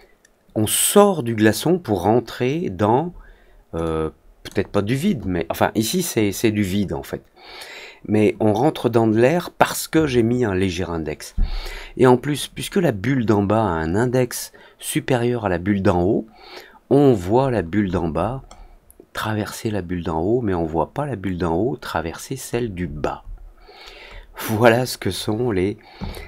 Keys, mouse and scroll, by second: 3.8-4.4 drag, 17.4-18.6 scroll up 8, 22.4-23.9 scroll down 8, 24.0 scroll up 1.